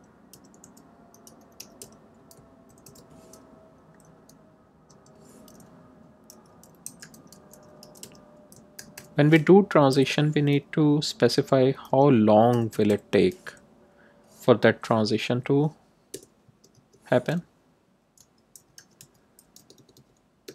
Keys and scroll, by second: 0.0-3.3 typing, 4.1 Return, 4.6 Tab, 6.3-9.4 typing, 9.8 Left, 11.8 5, 12.4 0, 15.2 Right, 16.0 Return, 16.4 Tab, 17.9-19.5 typing.